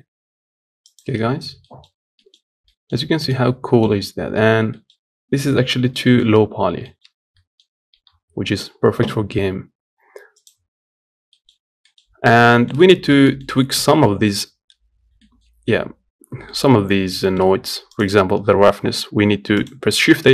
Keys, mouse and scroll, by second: 1.1 scroll down 1, 1.4 middle click, 1.6-2.4 scroll up 2, 1.9 middle click, 2.4 middle click, 3.1 middle click, 3.7 scroll down 3, 4.4 middle click, 5.1 z, 5.7 middle click, 6.3 scroll down 3, 6.6 shift+middle click, 6.8 scroll up 2, 7.1 middle click, 7.8 z, 8.0 scroll down 1, 8.2 middle click, 8.4-10.0 scroll up 3, 10.2 click, 10.6-11.1 scroll down 1, 11.1 middle click, 11.3-11.6 scroll up 1, 11.6-20.3 middle drag.